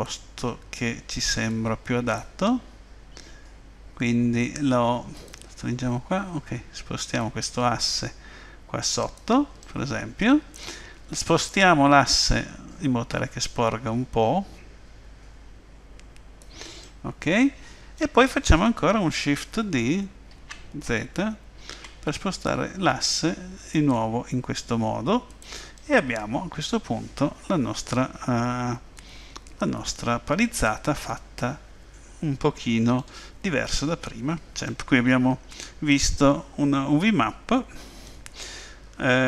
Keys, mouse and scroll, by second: 5.2 click, 7.2 click, 9.6 middle click, 12.2 click, 16.8 middle click, 20.3 shift+d, 25.8 middle click, 33.7 middle click, 35.9 middle click.